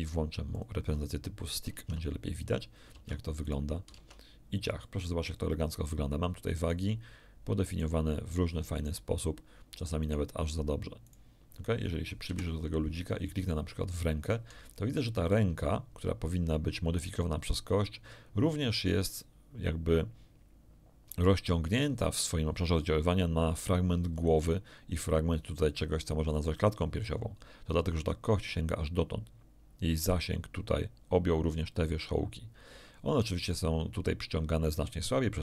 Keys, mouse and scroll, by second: 0.5 click, 1.7 ctrl+Tab, 2.9 ctrl+Tab, 3.4 ctrl+right click, 4.8 ctrl+Tab, 4.8-6.0 ctrl+middle drag, 6.6 right click, 7.6 right click, 8.7 right click, 10.0 right click, 11.0 right click, 11.4 scroll up 1, 12.2 KP_1, 13.8 right click, 14.7 shift+click.